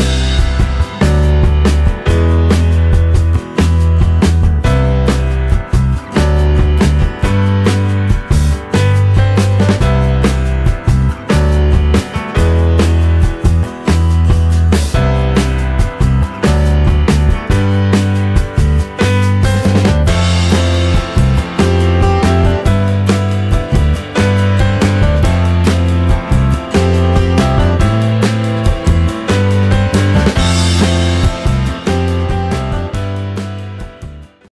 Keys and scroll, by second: 1.6 Delete, 4.8 ctrl+z, 5.7 ctrl+v, 31.1 Delete.